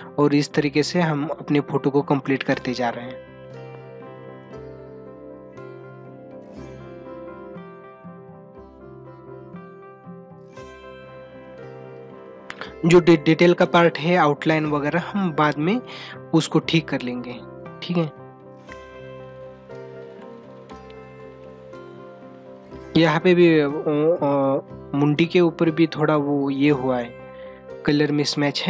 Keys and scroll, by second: 21.3 space.